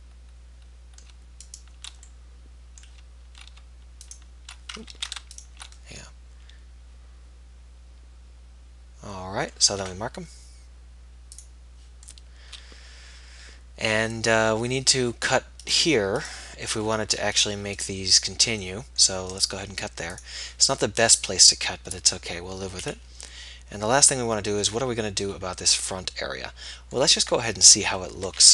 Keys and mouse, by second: 0.2-1.6 middle drag, 1.8-3.7 middle drag, 4.4 click, 5.2 ctrl+z, 16.5-20.4 right drag, 20.4-21.4 drag, 21.4-22.4 middle drag, 25.5 middle click, 26.3-28.5 middle drag.